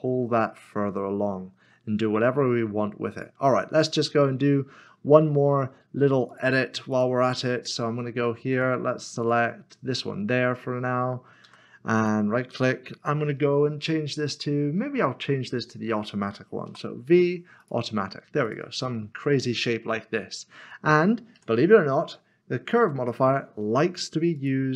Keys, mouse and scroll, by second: 6.3 click, 11.4 w, 12.0 right click, 17.6 click, 19.4 middle click, 24.4 click.